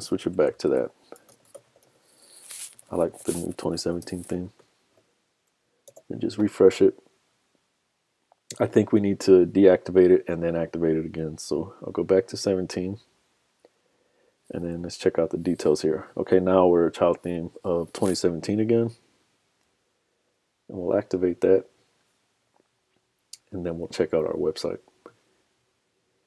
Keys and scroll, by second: 4.0 super+s, 4.6 super+Tab, 6.0 super+r.